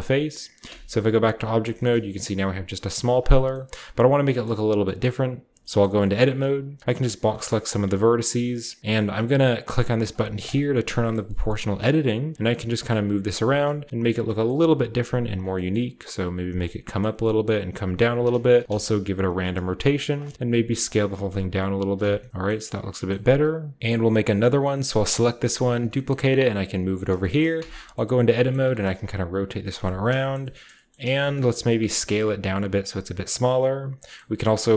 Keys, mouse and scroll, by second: 0.0-1.1 middle drag, 0.3-1.1 typing, 1.1-1.5 drag, 1.6-2.7 shift+middle drag, 3.1-5.0 shift+middle drag, 3.6-5.5 scroll up 1, 5.3 Tab, 5.9 middle click, 6.1-7.6 typing, 6.1 click, 6.8 click, 8.2 middle click, 10.3 click, 11.3 g, 11.7-13.6 drag, 11.7-13.2 scroll down 1, 12.4 right click, 12.4 g, 13.1 g, 13.8-14.9 scroll up 1, 14.4 g, 14.9-16.6 scroll down 1, 15.2 click, 15.6-16.2 typing, 16.6-18.6 scroll up 1, 17.9-21.3 typing, 18.1 click, 18.2 middle click, 21.8-22.2 middle drag, 21.9 Tab, 22.0 scroll down 1, 22.2 click, 22.3 a, 23.0-24.4 scroll up 1, 23.1 Tab, 23.8 Tab, 23.8 h, 25.5-26.8 right drag, 25.5 d, 26.8-27.9 drag, 27.3-29.5 scroll up 1, 27.5 Tab, 28.0 a, 28.1 a, 28.5 shift+middle click, 28.5 r, 28.7 z, 30.9-31.9 typing, 31.6 click, 32.7 click, 33.4-34.7 scroll up 1, 34.3 typing.